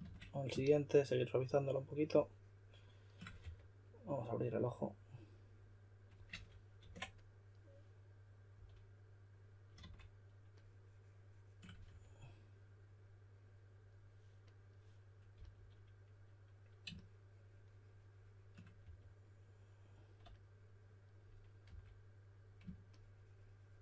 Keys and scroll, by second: 3.4 4, 6.8 super+z, 8.5 d, 9.8 shift+d, 11.9 4, 15.3 s, 18.8 4, 21.7 d.